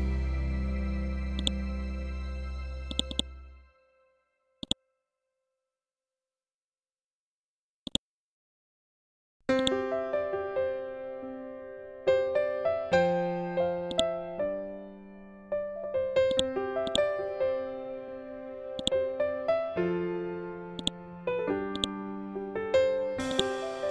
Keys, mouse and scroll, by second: 5.8 shift+Tab, 7.4 click, 7.8 scroll down 1, 9.0 click, 13.4 click, 13.9 scroll down 1, 15.8-20.2 ctrl+drag.